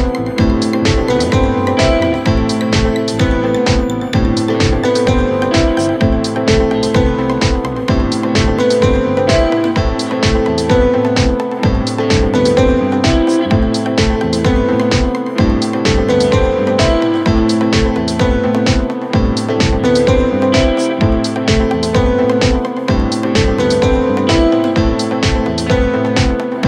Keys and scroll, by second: 2.5 F3, 15.7 Delete, 20.6 shift+F2, 21.0 Escape, 24.1 shift+Page_Up, 25.8 c, 26.3 Escape.